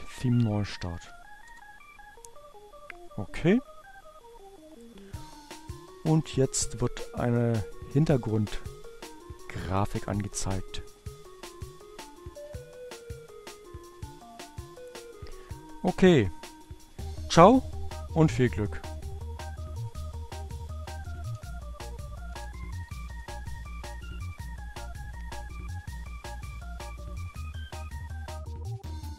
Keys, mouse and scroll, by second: 0.1 r, 0.2 Return, 15.3-16.6 drag, 19.2 ctrl+x, 21.3-22.8 typing.